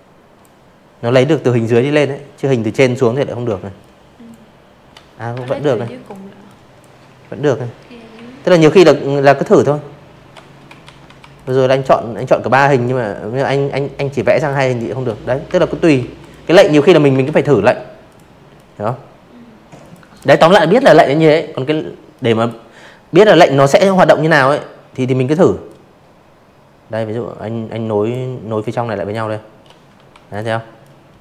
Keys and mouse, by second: 0.4 m, 0.7 click, 2.4 ctrl+z, 2.8 v, 3.0 click, 3.4 click, 5.1 m, 5.8 click, 7.8 ctrl+z, 8.1 v, 8.3 click, 8.7 click, 10.4 shift+m, 10.9 shift+click, 12.5 ctrl+z, 12.9 v, 13.1 click, 14.2 ctrl+z, 15.0 click, 15.5 click, 16.7 click, 19.1 click, 20.7 m, 22.6-25.1 drag, 25.6 click, 27.1 v, 27.3 click, 27.8 click, 29.1 ctrl+z, 29.5 click, 30.2 ctrl+z, 30.3 click, 30.9 ctrl+z, 31.0 click.